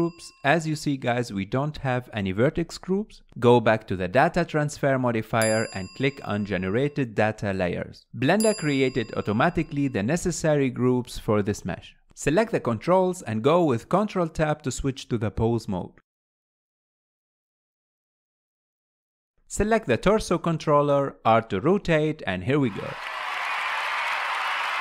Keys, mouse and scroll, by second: 1.2 click, 5.2-6.6 drag, 7.5-8.6 scroll up 10, 8.6-10.1 scroll down 8, 10.1 click, 11.8-13.7 drag, 15.7 ctrl+Tab, 17.0-18.5 drag, 18.5 ctrl+Tab, 19.0 ctrl+Tab, 19.4 click, 19.7-24.8 middle drag, 21.0 r.